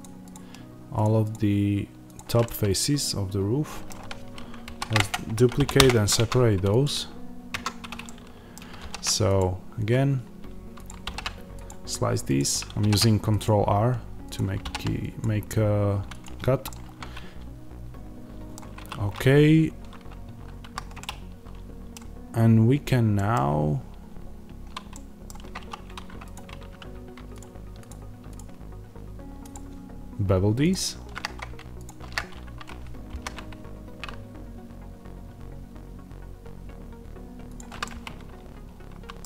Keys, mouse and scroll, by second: 2.3-6.7 middle drag, 4.5 shift+d, 5.0 Return, 5.7 p, 5.7 Return, 6.1 Tab, 6.7 click, 7.4 Tab, 7.9-10.7 middle drag, 8.7 ctrl+r, 10.7 click, 10.9 ctrl+r, 16.1 click, 16.6-26.2 middle drag, 18.7 3, 20.5 a, 22.3-23.0 scroll up 2, 25.5 2, 26.2 alt+click, 33.0 ctrl+b, 37.5 click, 37.7-39.2 middle drag.